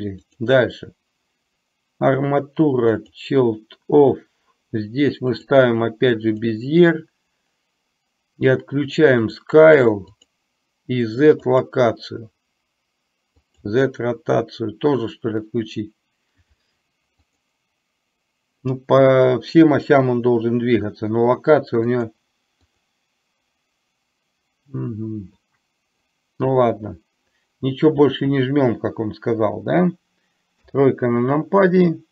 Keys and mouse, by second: 0.4-3.2 drag, 5.4-6.5 drag, 9.4 drag, 10.2 click, 11.7 click, 13.5 click, 17.4 click, 22.0 click, 22.7 click.